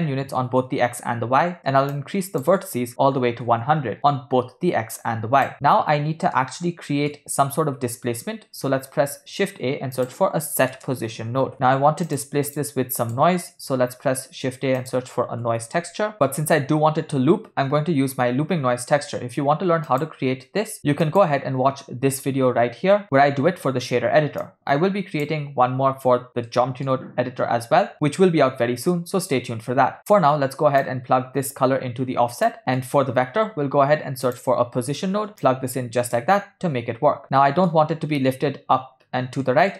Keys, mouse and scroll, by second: 2.0-3.6 shift+drag, 3.1 0, 5.0 click, 5.5 middle click, 6.4-7.1 ctrl+middle drag, 9.1 shift+a, 13.0 click, 13.4 middle click, 13.9 shift+a, 24.4-25.3 drag, 26.5 shift+middle click, 29.0 ctrl+middle click, 30.9-32.6 drag, 32.6 middle click, 33.4 shift+a, 35.4-36.3 drag, 37.2 middle click, 39.4-39.7 middle drag.